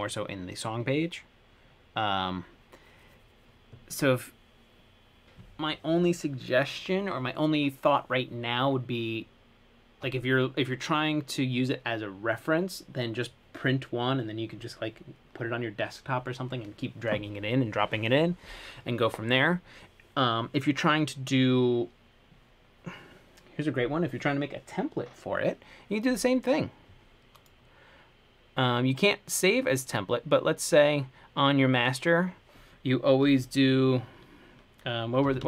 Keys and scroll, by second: 35.2-35.4 typing.